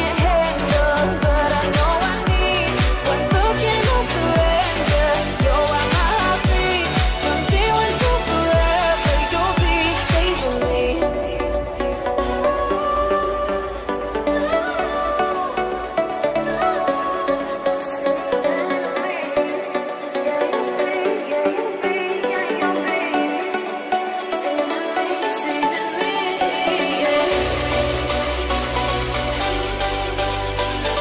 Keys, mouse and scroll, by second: 9.6-12.0 drag, 12.0 scroll down 1, 12.6 middle click, 13.7 click, 13.9-14.2 scroll up 1, 14.8-17.8 drag, 17.8-19.6 shift+middle drag, 19.6-22.8 drag, 22.8 scroll up 1, 23.6-29.2 drag, 29.2-29.6 scroll down 2, 29.6-30.9 middle drag, 30.9-31.0 drag.